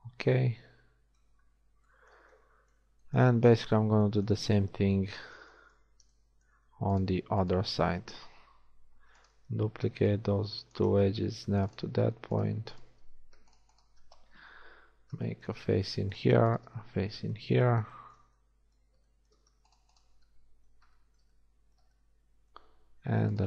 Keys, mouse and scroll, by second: 6.6 z, 7.8 z, 9.0 shift+d, 11.0 z, 14.9 f, 15.7 z, 20.8 f.